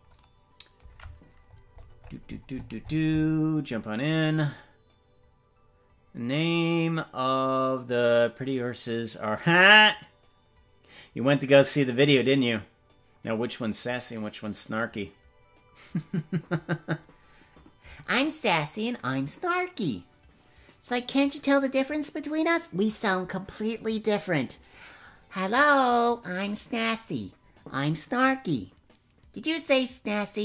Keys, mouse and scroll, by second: 1.4-5.3 scroll up 50.